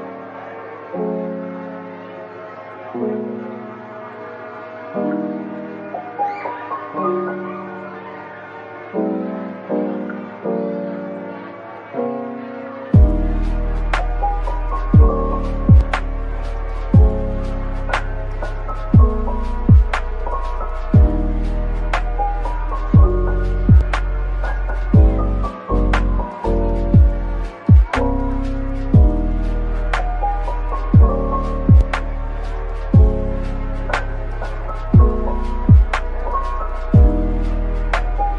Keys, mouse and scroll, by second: 0.2 middle click, 1.6-2.0 typing, 3.3-4.2 typing, 6.1 typing, 7.8 scroll up 1, 8.2-8.8 typing, 10.6-10.9 typing, 12.6 middle click, 13.7 Tab, 14.2 Tab, 14.8-15.6 typing, 16.8 middle click, 20.2 typing, 21.1 ctrl+b, 22.9 Tab, 23.1 middle click, 28.7-29.0 scroll down 1, 29.0 middle click, 33.9-34.8 typing, 36.8-38.3 typing.